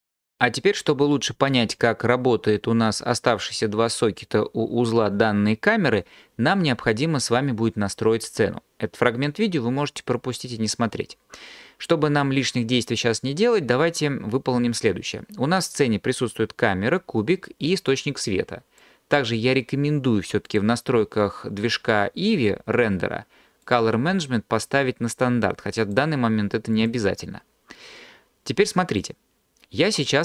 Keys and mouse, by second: 20.5 click, 25.9-26.9 drag.